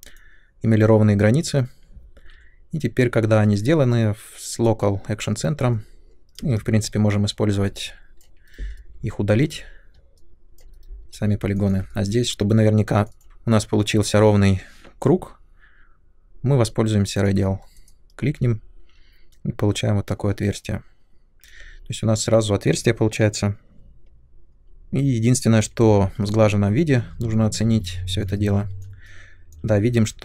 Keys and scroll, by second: 2.1 r, 6.3 space, 6.6 2, 7.6 3, 8.4 Delete, 10.7 Delete, 11.0 2, 23.7 space, 25.7 Tab, 27.2 ctrl+1.